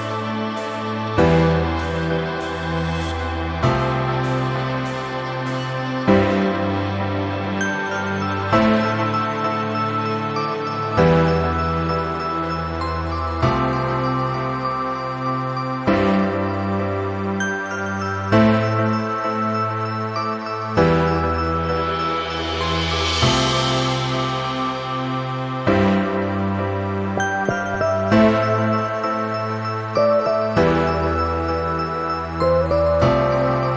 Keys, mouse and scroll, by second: 1.1 v, 1.4-3.4 drag, 18.8-19.9 drag.